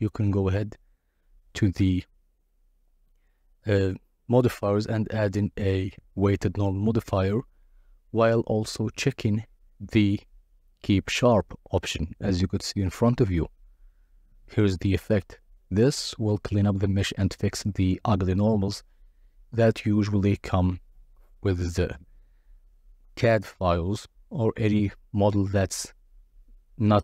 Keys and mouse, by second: 0.3-3.5 middle drag, 3.5 drag, 8.5 click, 9.5 middle click, 12.0 click, 14.0 click, 14.3 click, 15.0 click, 20.0 KP_Divide.